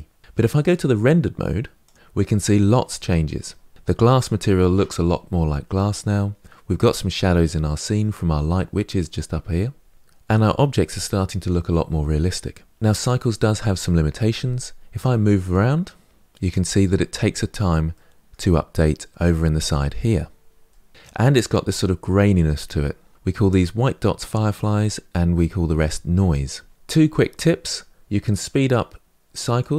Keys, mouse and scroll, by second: 1.6 click, 14.9-27.5 middle drag.